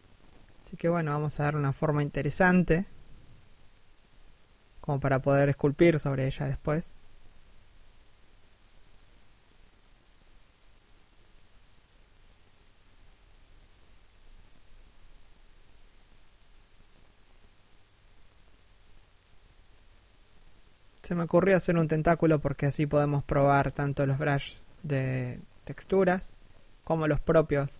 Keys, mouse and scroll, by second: 0.3 right click, 0.5 alt+s, 1.1 1, 1.7 e, 2.4 alt+s, 3.5 alt+shift+middle click, 3.8 g, 4.3 right click, 4.5 r, 5.6 6, 6.4 scroll down 1, 6.5 shift+middle click, 7.2 7, 7.9 g, 9.0 right click, 9.1 g, 9.8 3, 10.2 scroll up 1, 10.4 r, 12.4 right click, 12.5 g, 14.0 right click, 15.6 right click, 16.2 g, 17.0 right click, 17.8 right click, 18.5 right click, 18.9 g, 19.6 right click, 21.0 3, 21.1 1, 22.5 right click, 23.0 s, 26.0 alt+s, 27.1 right click.